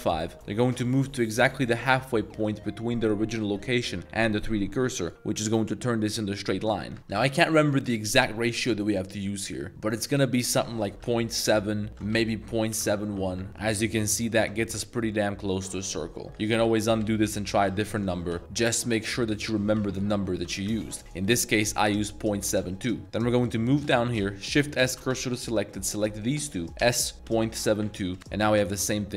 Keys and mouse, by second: 0.0-1.0 typing, 5.0 click, 7.2 s, 11.4-13.0 typing, 11.9 ctrl+z, 13.2 Return, 13.9 Tab, 14.1 middle drag, 14.4 2, 14.6 a, 14.8 a, 15.0 middle click, 16.2 shift+middle click, 16.3 1, 16.4 ctrl+z, 16.6 ctrl+z, 16.8 ctrl+z, 17.0 ctrl+z, 17.3 ctrl+z, 17.9 ctrl+z, 18.3 s, 19.2 ctrl+z, 19.8 s, 20.1 ., 20.4 7, 20.7 2, 20.8 Return, 22.9-23.2 shift+middle drag, 23.4 click, 25.0 shift+s, 25.8 click, 26.2 shift+click, 26.8 s, 27.5 7, 27.8 2, 28.1 Return.